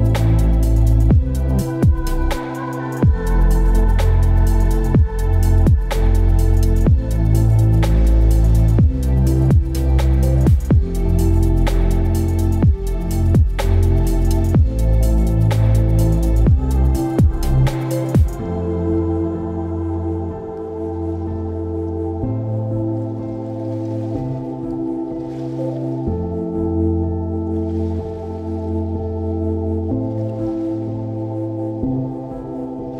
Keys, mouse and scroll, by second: 3.2 double click, 6.4 alt+click.